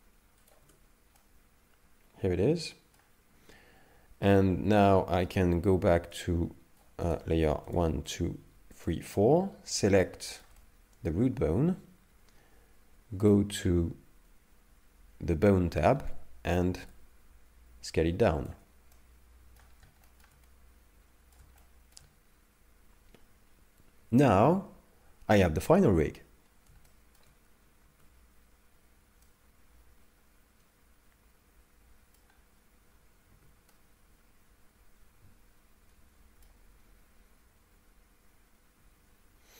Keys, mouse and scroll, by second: 0.6 Tab, 1.2 middle click, 6.2 click, 7.1 click, 7.7 shift+click, 8.1 shift+click, 8.8 shift+click, 9.7 click, 9.8 right click, 9.8 right click, 10.2 shift+middle click, 10.6 middle click, 12.0-12.8 scroll down 2, 13.3 click, 15.7-16.4 scroll down 7, 17.0 shift+click, 18.9 middle click, 19.7 scroll down 2, 20.1 shift+middle click, 20.5 middle click, 21.6 shift+middle click, 26.3-26.9 scroll up 1, 26.9 shift+middle click, 27.6 a, 27.9 a, 29.2 middle click, 33.3 z, 33.7 middle click, 38.8 z.